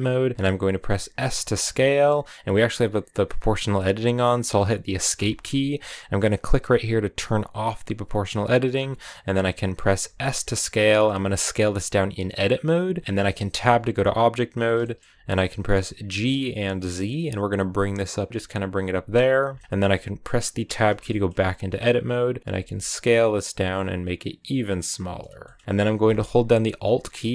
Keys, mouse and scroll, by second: 0.1 scroll up 2, 0.7 s, 7.6 click, 8.6 s, 9.6 click, 9.9 s, 12.9 middle click, 13.1 g, 13.3 Tab, 14.6 shift+middle click, 15.2-15.9 scroll up 1, 15.9 g, 19.4 shift+middle click, 19.6-20.0 scroll up 2, 20.5 Tab, 20.9 shift+middle click, 21.2-21.7 shift+scroll up 2, 22.4 s, 25.2-27.3 shift+middle drag.